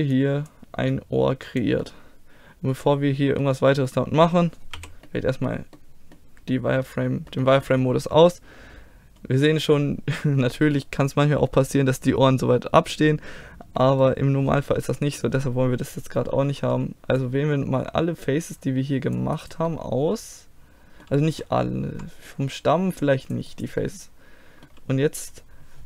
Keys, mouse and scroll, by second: 0.2-2.1 drag, 2.1 middle click, 3.7 middle click, 4.8 middle click, 5.2 z, 6.0-7.0 middle drag, 7.1 middle click, 7.4-10.7 middle drag, 14.0 middle click, 14.9 z, 16.6 c, 19.5 click, 19.7-21.4 middle drag, 21.9 c, 23.7-25.8 middle drag.